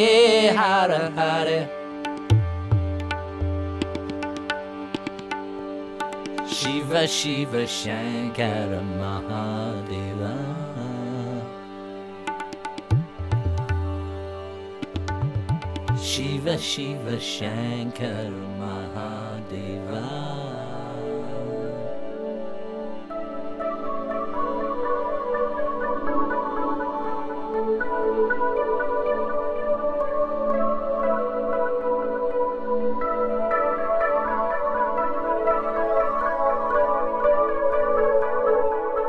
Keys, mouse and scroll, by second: 1.0 click, 1.9 click, 5.7 click, 6.6 click, 8.0 click, 8.8 click, 11.5-12.3 drag, 12.7 click, 13.5 click, 14.3 click, 16.2 click, 17.0-19.6 typing, 20.4 click, 21.4-21.7 typing, 22.8-24.2 typing, 23.0 click, 23.5 click, 26.6 click, 27.4 click, 28.6 click, 29.6 click, 31.4 click, 32.2 click, 33.2 click, 35.4 click, 36.6 click, 38.2 click.